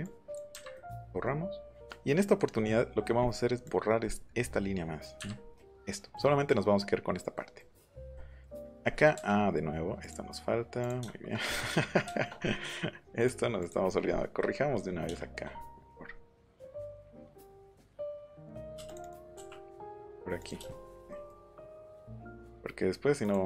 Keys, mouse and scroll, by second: 0.0 click, 0.5 Delete, 3.6 click, 5.1 Delete, 5.6 middle click, 7.6 middle click, 8.1 middle click, 8.5-8.9 scroll up 2, 10.0 click, 10.7 click, 11.0 shift+middle click, 11.5 middle click, 11.5 scroll up 1, 11.6 scroll down 1, 13.1 click, 13.6 click, 15.1 shift+middle click, 17.3 click, 18.7 space, 18.8 click, 19.7 click, 20.6 shift+middle click, 21.1-22.2 shift+scroll up 3, 23.2 click.